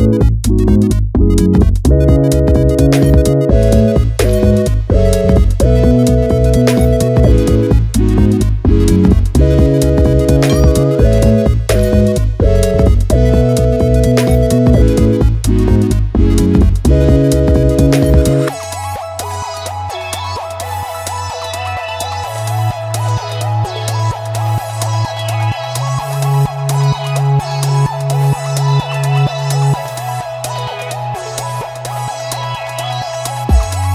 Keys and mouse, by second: 2.4 ctrl+click, 2.7-3.3 ctrl+drag, 3.9-4.5 drag, 4.5 middle drag, 4.8 click, 5.8-33.9 drag.